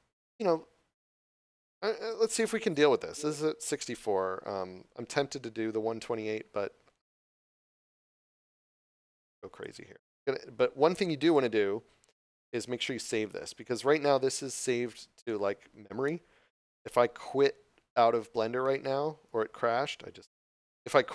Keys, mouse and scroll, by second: 9.5 click.